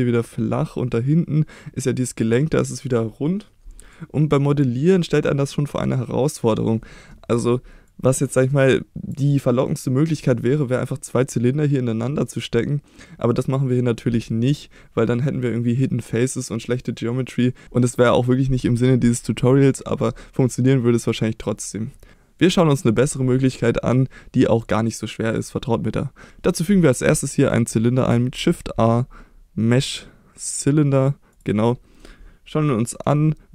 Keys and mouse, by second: 27.3 middle click, 28.4 shift+a, 31.8 middle click.